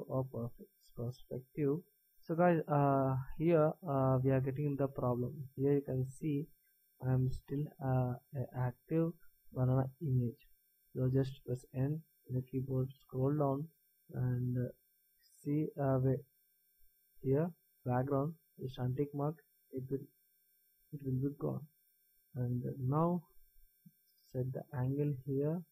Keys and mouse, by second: 1.2-11.7 middle drag, 11.7 n, 12.7-18.9 middle drag, 21.8 n, 23.7-25.7 middle drag.